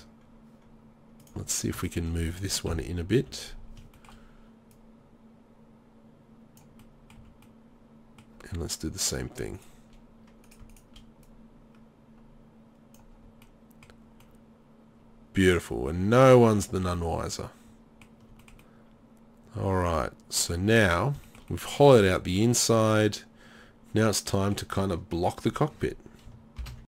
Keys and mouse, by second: 2.7 KP_3, 3.2 z, 7.2 z, 9.1-10.4 right drag, 21.5 middle click, 23.2 middle click.